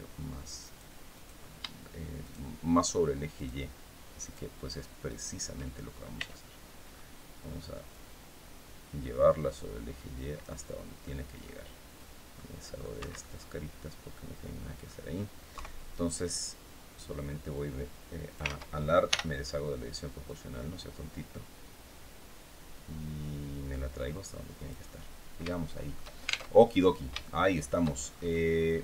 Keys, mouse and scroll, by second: 0.3 right click, 0.8 right click, 1.9 shift+right click, 3.0 shift+right click, 3.9 shift+right click, 4.7 shift+right click, 5.8 c, 6.6 scroll up 1, 7.6-10.3 drag, 10.7 middle click, 12.0 middle click, 12.6 Escape, 12.9-14.7 middle drag, 15.2 KP_3, 15.8 scroll down 1, 17.2-18.3 drag, 18.2 ctrl+z, 18.8 o, 20.0-24.6 drag, 24.7-25.0 scroll down 1, 25.2 shift+middle click, 26.2 alt+shift+Tab, 26.9 shift+middle click, 27.7-28.1 shift+scroll up 1, 28.3 middle click.